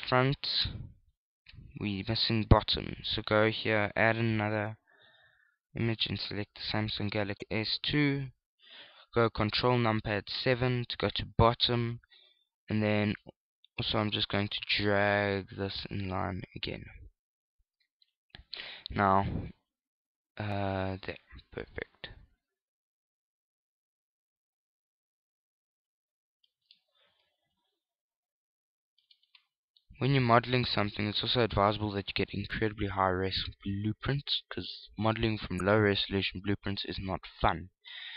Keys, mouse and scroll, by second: 3.8 click, 5.6 click, 11.4 ctrl+KP_7, 14.7 shift+click, 18.8 shift+click, 28.3 click, 30.8 shift+middle click, 35.7 click, 37.1-37.7 scroll down 5, 37.4 scroll up 1.